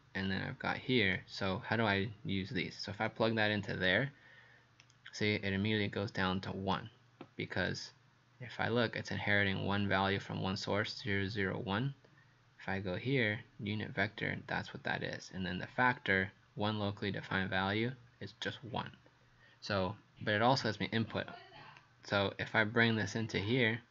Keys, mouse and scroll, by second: 4.8 right click, 21.8 click.